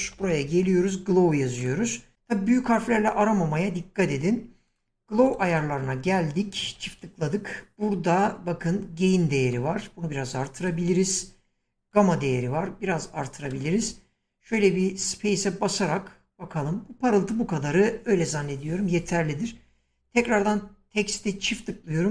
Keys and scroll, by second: 0.0-1.0 typing, 14.6 space, 17.6 space.